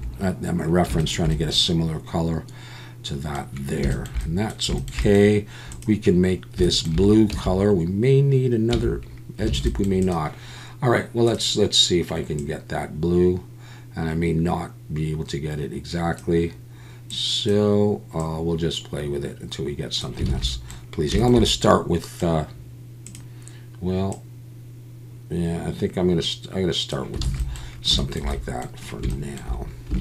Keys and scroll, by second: 7.3 Tab, 8.7 Tab, 9.5 alt+a, 20.3 alt+a, 27.2 alt+a.